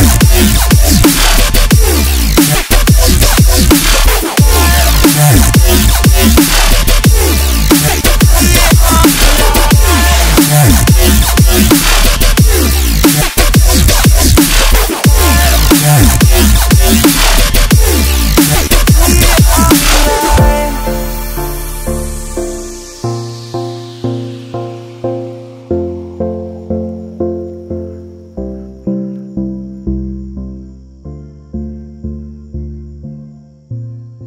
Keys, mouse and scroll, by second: 0.5-1.8 middle drag, 1.8-3.3 drag, 2.7-4.3 middle drag, 3.3 KP_1, 4.3 KP_7, 4.8 KP_3, 5.6 ctrl+s, 5.9 click, 6.4 scroll down 3, 6.4 click, 6.7 click, 7.1-7.7 scroll down 2, 7.7-8.7 drag, 10.2 g, 12.1-13.5 scroll up 6, 14.3-16.0 drag, 16.0 shift+a, 17.6 click, 19.1 BackSpace, 20.2 BackSpace, 21.7 Tab, 21.7-22.4 scroll down 13, 22.4 s, 22.9 s, 22.9 s, 23.4 scroll, 23.4-23.9 scroll up 7, 23.9 shift+middle click, 24.1-24.4 scroll up 1, 24.4-25.6 drag, 27.3 r, 28.1 click, 28.8 click, 29.5-29.9 scroll up 3, 29.9 shift+middle click, 30.3 r, 31.1 s, 31.8 click, 32.4 click, 32.5 click, 33.3 click, 33.4 click.